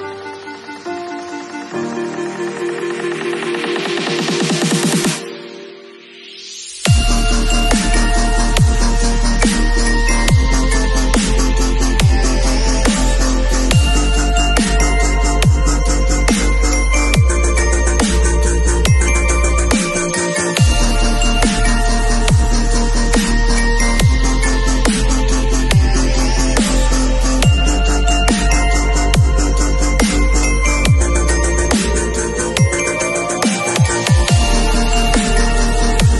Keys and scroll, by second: 0.5 v, 1.6 space, 20.3 shift+super+t.